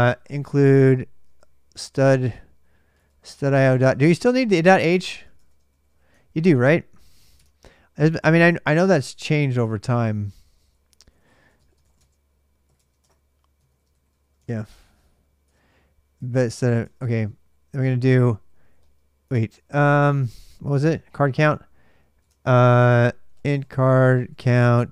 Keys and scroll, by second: 0.0-6.1 typing, 7.1 super+Tab, 9.3 super+Tab, 10.0-15.0 typing, 12.5 Tab, 12.8 Return, 13.3 ctrl+[, 15.2 Return, 15.9 ctrl+[, 16.0 ctrl+j, 16.3 o, 16.6 Return, 17.0 ctrl+a, 17.1 ctrl+a, 18.2-19.1 typing, 20.2 super+Tab, 22.0 super+Tab, 22.3-23.1 typing.